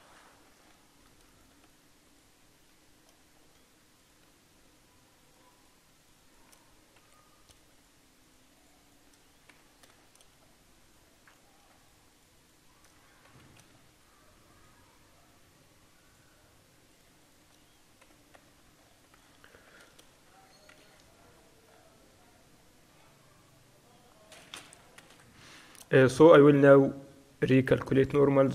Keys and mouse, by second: 1.4-4.0 shift+right drag, 4.0 middle click, 4.0 right click, 5.3 right click, 7.1 f, 9.6-10.6 drag, 9.6 f, 10.6-14.2 right drag, 13.3 f, 14.2-15.9 middle drag, 15.9-19.6 right drag, 18.1 f, 18.5 Tab, 19.6 Tab, 19.6-21.4 middle drag, 19.9 a, 20.7 ctrl+n, 21.1 Tab, 21.9-25.0 middle drag, 23.5 Tab, 25.1 ctrl+n, 25.5 t.